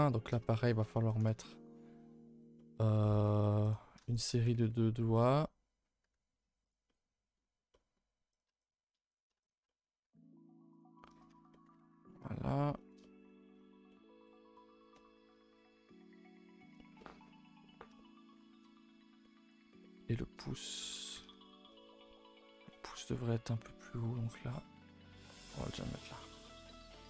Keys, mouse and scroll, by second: 0.0 a, 0.2 a, 0.3 shift+middle click, 1.2 a, 1.3 a, 1.5-3.6 middle drag, 3.6 click, 4.1 shift+click, 4.4 g, 5.4 middle click, 6.0 g, 6.9 middle click, 7.4-7.7 scroll up 2, 7.7 middle click, 8.3 click, 8.6 shift+click, 9.1 click, 9.4 shift+click, 9.6 middle click, 11.0 middle click, 11.3 a, 11.4 a, 11.5 middle click, 11.8 ctrl+s, 11.9-12.8 scroll down 4, 12.1 middle click, 12.8 shift+middle click, 13.5 scroll down 2, 13.9 middle click, 14.1 scroll up 2, 14.5-17.4 middle drag, 17.4-17.7 scroll down 2, 17.7 scroll up 2, 18.3-19.5 shift+middle drag, 19.5-19.8 scroll up 1, 19.8-21.0 shift+middle drag, 21.0 a, 21.2 a, 21.7-24.8 middle drag, 25.1 3, 25.5 click, 25.9 shift+middle click, 26.1 scroll up 1, 26.3-27.0 middle drag.